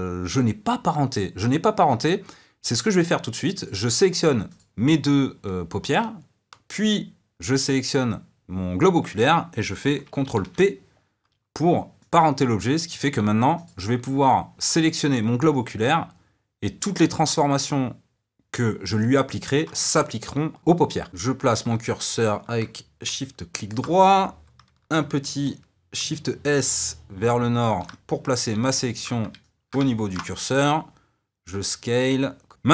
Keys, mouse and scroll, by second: 4.5 shift+click, 6.8 shift+click, 12.1 ctrl+p, 12.9 click, 13.6 click, 15.4 s, 22.1-23.2 shift+right drag, 23.2-27.8 shift+middle drag, 27.8 shift+s, 29.4-30.6 ctrl+middle drag, 30.6 s, 32.5 x.